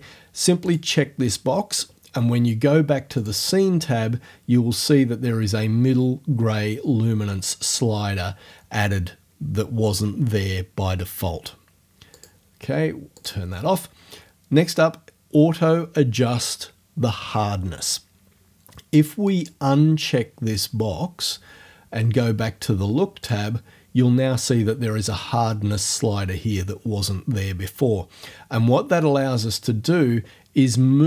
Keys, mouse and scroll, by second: 0.7 click, 3.2 click, 12.2 click, 13.2 click, 19.3 click, 19.6-23.2 middle drag, 23.2 click, 23.5 middle click.